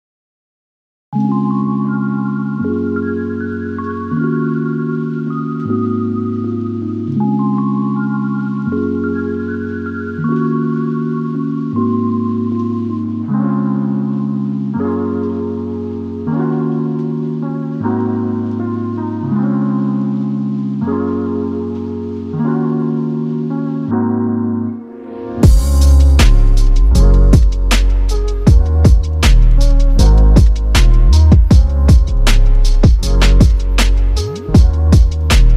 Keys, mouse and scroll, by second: 0.3-0.9 scroll down 17.